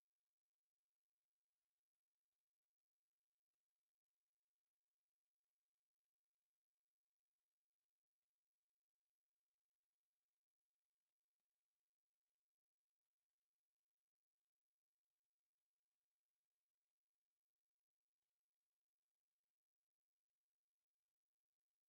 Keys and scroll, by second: 2.0 Escape, 3.1 c, 8.3 Escape, 9.4 p, 9.7 space, 10.4 F8, 12.5 m, 13.4 Escape, 14.3 c, 14.6 space, 15.4 F8, 16.2 Escape, 20.4 c, 20.7 space, 21.3 F8.